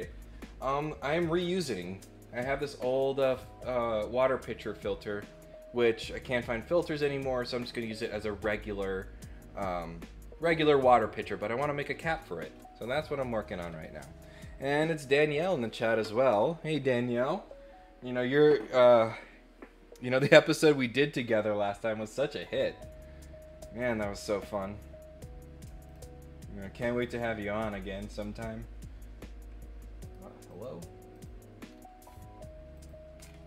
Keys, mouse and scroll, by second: 25.8 click, 27.0 click, 30.0 right click, 30.5 click, 31.1 click, 31.6-32.1 scroll up 4, 32.7 click, 33.1 scroll down 2, 33.2 scroll up 1.